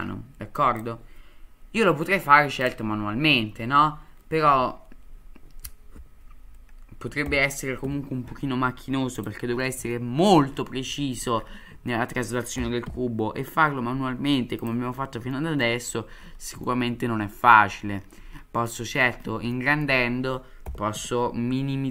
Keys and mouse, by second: 7.2 g, 9.9-10.3 middle drag, 10.9 shift+middle drag, 11.9 shift+middle click, 12.5 g, 15.3-15.6 shift+middle drag, 16.6-17.5 shift+middle drag, 18.7-19.0 shift+middle drag, 19.5-19.8 shift+middle drag, 20.7 g.